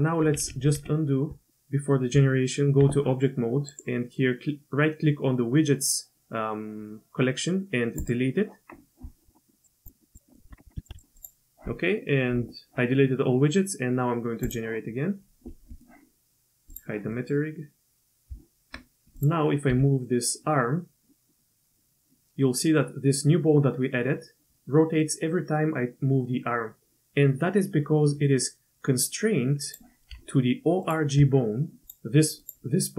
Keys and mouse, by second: 0.5 ctrl+z, 0.8 ctrl+z, 2.1 Tab, 3.7-8.1 drag, 9.6 drag, 10.1 click, 10.3 middle click, 10.5 Tab, 10.8 shift+click, 10.9 x, 14.5 click, 15.7 middle click, 16.7 click, 17.1 middle click, 18.3 Tab, 19.1 click, 19.7 g, 24.4 g, 30.8 shift+click, 31.8 click, 32.4 click.